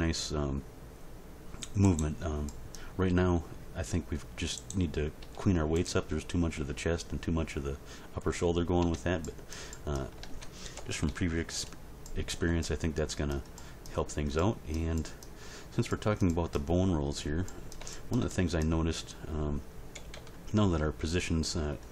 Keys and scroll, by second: 3.1 r, 5.2 r, 8.8 Tab, 10.7 End, 11.1 Page_Down, 19.9 End, 20.1 Page_Down.